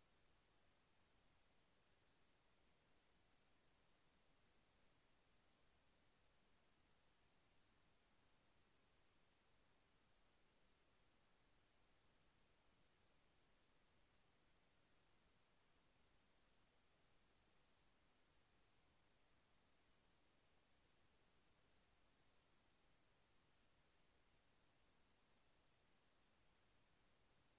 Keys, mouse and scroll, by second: 0.8 ctrl+a, 1.1 ctrl+c, 2.5 click, 2.7 Return, 4.0 ctrl+v, 5.9-7.5 drag, 10.3 click, 11.3 click, 13.4-17.0 drag, 20.8 click, 22.9 click, 24.8 click.